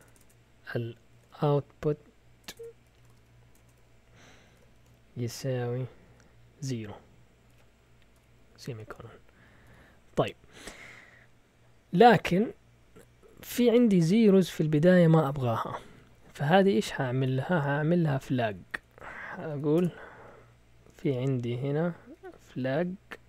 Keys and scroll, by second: 0.0-6.0 typing, 7.2-10.1 typing, 17.9 Up, 18.1 Up, 18.2 Up, 18.4 Up, 18.5 Up, 18.8-19.4 Up, 19.4 End, 19.7 Return, 20.6-23.2 typing.